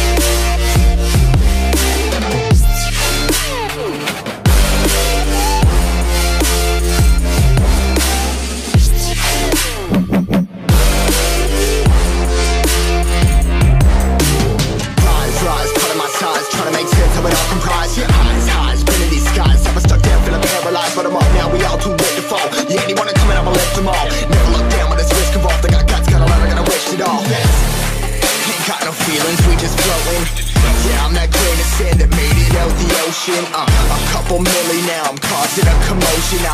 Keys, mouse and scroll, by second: 0.1 click, 9.5 ctrl+t, 10.8 click, 12.4-13.5 scroll up 1, 13.5 click, 13.6 right click, 14.5 click, 14.8-15.3 scroll up 1, 15.3 click, 16.2 scroll up 1, 16.4 click, 18.5 ctrl+c, 18.7 click, 19.8 Delete, 20.2 click, 20.4 Delete, 21.0 ctrl+v, 21.3 ctrl+t, 21.5 ctrl+0, 21.8 click, 22.5 ctrl+0, 22.9 click, 24.7 Return, 25.3 click, 30.8 scroll up 1, 31.1 click, 34.3 click, 35.1 alt+Tab, 35.6 click, 35.9 c, 36.2 click.